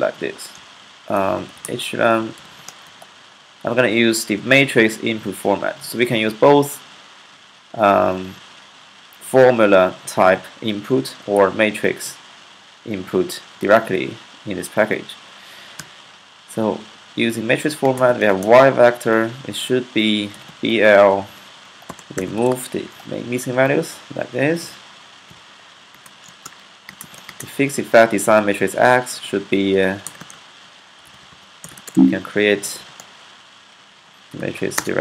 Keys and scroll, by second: 0.0-2.3 typing, 2.7 Left, 5.4 typing, 15.7 typing, 17.8 typing, 20.0-22.7 typing, 20.9 alt+8, 21.1 alt+9, 24.9-27.2 typing, 29.7-32.9 typing, 33.7 Left, 34.8-35.0 typing.